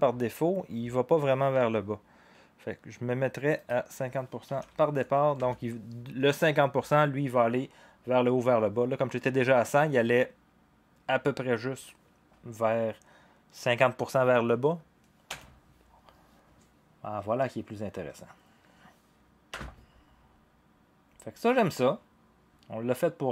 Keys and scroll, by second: 4.3-5.3 typing, 15.3 0, 19.5 0.